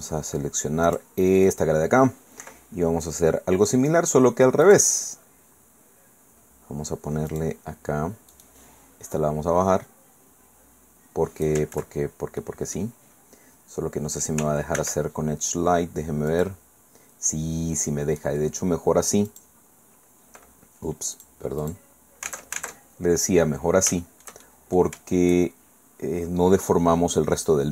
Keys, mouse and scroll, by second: 0.9 click, 1.4 click, 2.4 i, 4.6 click, 7.3 click, 8.3 click, 9.1-11.6 drag, 11.7 ctrl+z, 12.4 click, 12.9-13.5 scroll up 2, 13.5-14.3 scroll down 2, 14.8 ctrl+e, 16.3 click, 19.3 click, 21.1 click, 21.6 click, 22.3 alt+Tab, 24.0 shift+middle click.